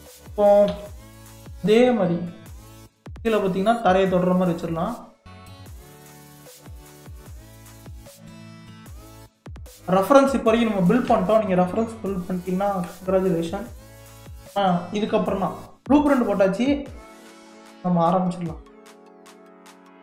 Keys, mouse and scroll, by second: 0.7 g, 7.4-7.7 middle drag, 7.7-8.2 scroll down 3, 8.2-10.1 middle drag, 10.1-10.5 scroll down 1, 10.5-11.6 middle drag, 11.6-12.2 scroll down 1, 12.2-14.9 middle drag, 14.9 scroll up 4, 15.4-15.9 scroll down 3, 15.9-19.0 middle drag.